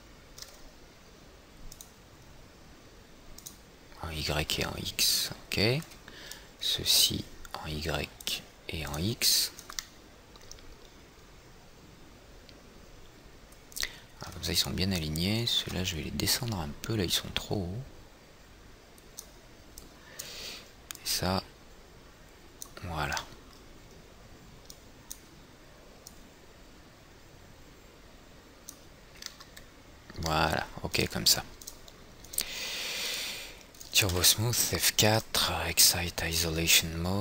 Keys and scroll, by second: 16.2 w, 34.8 F4.